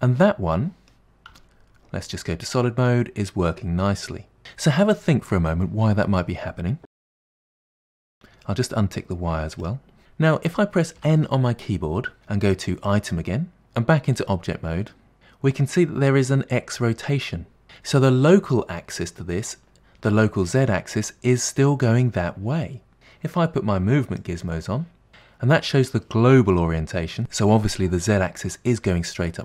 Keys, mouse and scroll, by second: 1.3 z, 2.9-4.4 middle drag, 9.6 click, 11.0 n, 12.9 click, 14.2 Tab, 24.2 click.